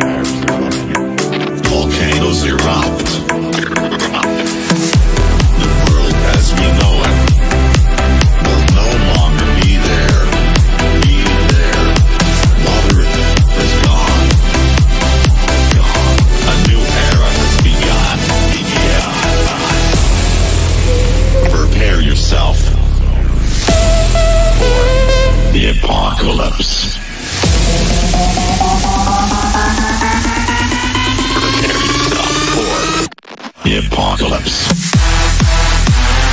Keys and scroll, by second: 21.9 F3, 22.1 Escape, 23.0 shift+F2, 26.9 F3, 31.8 ctrl+s, 32.7 Return, 33.9 F4, 35.1 shift+F2, 35.1 F3, 35.4 shift+Page_Up, 35.6 F3.